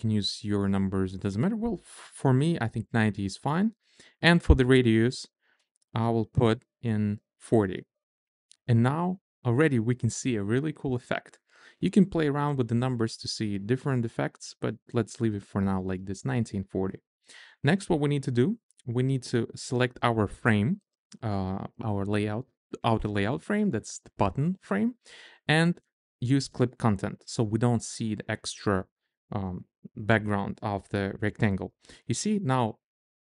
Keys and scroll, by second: 7.0-8.0 typing, 8.2 Return.